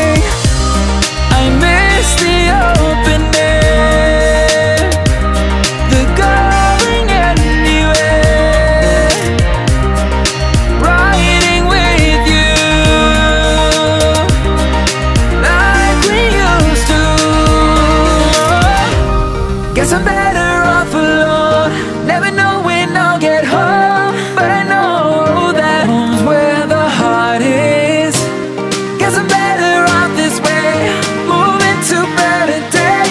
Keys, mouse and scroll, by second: 1.1-3.2 drag, 3.2-5.8 shift+middle drag, 5.8-10.7 drag, 12.4 h, 13.2 h, 15.0 alt+h, 16.3 click, 18.4 right click, 20.3 click, 21.3 click, 23.8 click, 25.9 click, 29.9 right click, 31.0 h.